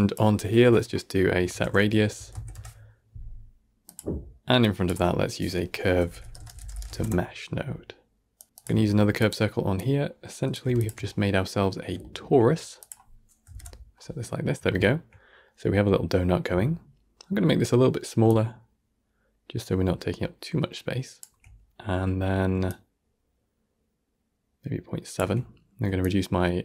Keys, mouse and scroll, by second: 8.3 middle click, 8.4 click, 8.6 shift+d, 9.6-11.2 drag, 11.2 middle click, 11.5-11.9 scroll up 1, 11.9-12.7 shift+middle drag, 12.7-14.2 drag, 14.2-14.6 scroll down 2, 14.6-18.1 shift+middle drag, 18.1-25.6 shift+drag, 25.9-26.6 shift+drag.